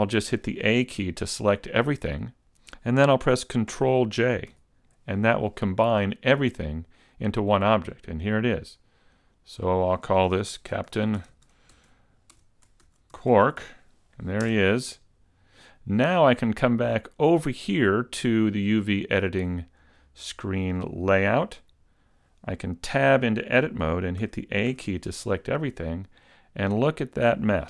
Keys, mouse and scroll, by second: 4.6 ctrl+j, 9.2 click, 18.3 click, 21.7-23.0 scroll up 1, 23.0 Tab, 24.2 a, 24.7 a, 26.9-27.5 scroll up 2.